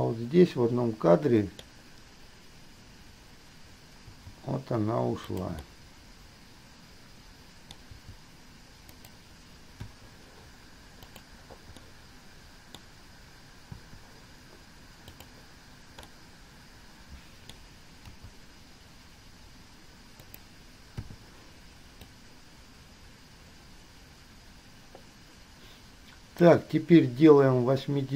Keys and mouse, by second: 4.2 g, 5.9-8.2 middle drag, 10.0 i, 11.3 click, 12.0-14.0 drag, 15.3 click, 16.3-18.3 drag, 18.3 g, 21.3 i, 22.2-26.7 drag.